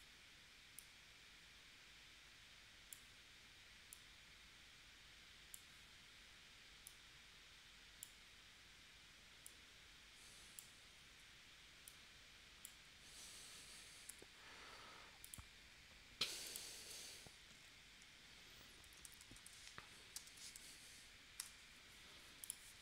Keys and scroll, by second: 14.1 v, 18.6-20.3 typing, 21.4 Return.